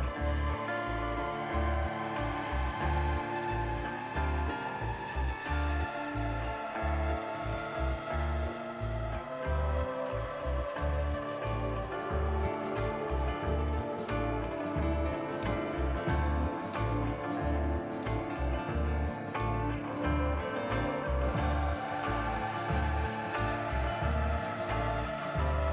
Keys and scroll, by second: 6.0 ctrl+c, 6.0 ctrl+v, 9.3 ctrl+c, 9.3 ctrl+v, 15.5 ctrl+c, 15.5 ctrl+v, 19.1 ctrl+c, 19.1 ctrl+v, 21.5 ctrl+c, 21.5 ctrl+v, 23.6 ctrl+z, 24.4 2.